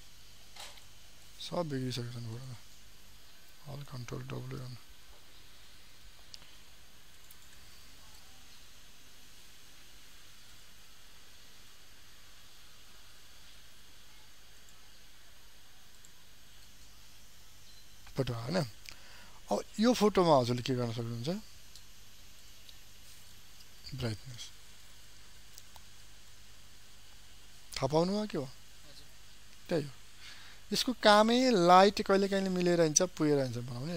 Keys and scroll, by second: 3.9 ctrl+alt+w.